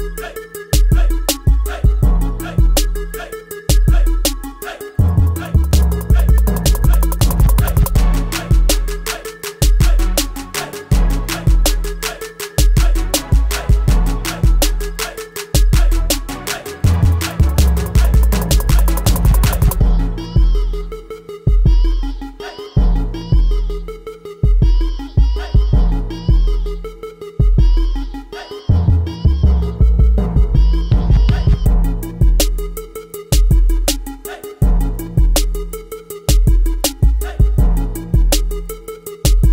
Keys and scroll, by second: 19.9 a, 25.8 v, 29.0 space, 33.9 ctrl+t, 34.4 ctrl+t.